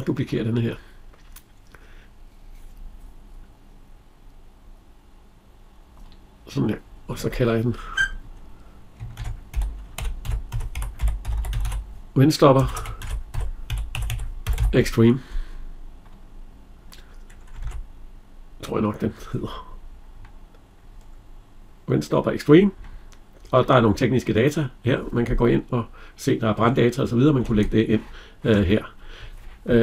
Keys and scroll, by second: 17.5 alt+Tab, 27.2 alt+Tab.